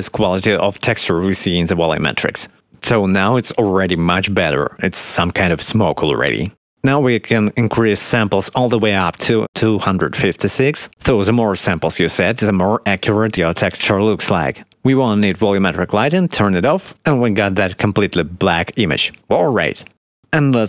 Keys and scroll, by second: 0.3 shift+`.